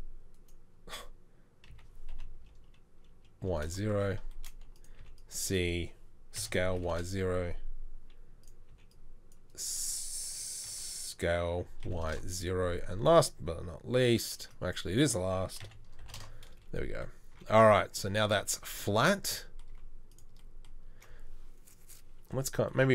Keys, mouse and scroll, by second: 1.7 s, 5.0 c, 6.4 s, 8.7 s, 8.8 c, 10.7 s, 14.4 c, 15.6 s, 17.4 z, 18.1 z, 18.8 z, 19.8 z.